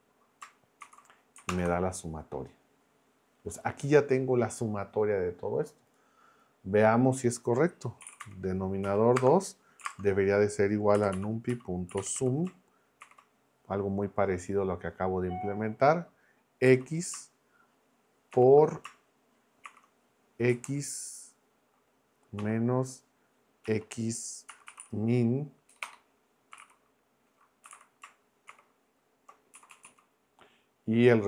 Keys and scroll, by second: 0.8 shift+0, 1.5 ctrl+Return, 7.8-13.0 typing, 16.6 x, 18.3 shift+8, 19.6 shift+9, 20.5 x, 22.4 -, 23.6-28.5 typing, 29.5 Right.